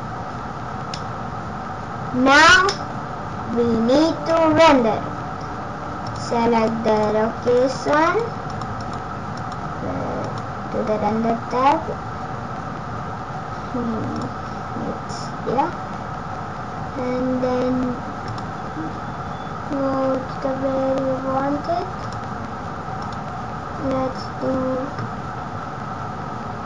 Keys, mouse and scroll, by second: 4.5 space, 6.0 click, 11.0 scroll down 1, 14.0 click, 15.0 scroll down 1, 18.2 click.